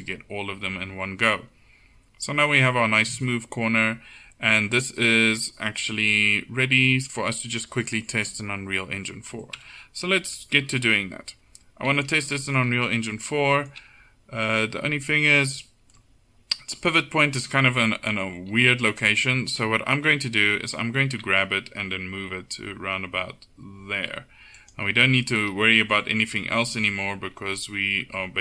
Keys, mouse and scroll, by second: 9.6 KP_1, 10.4 KP_7, 21.1 g.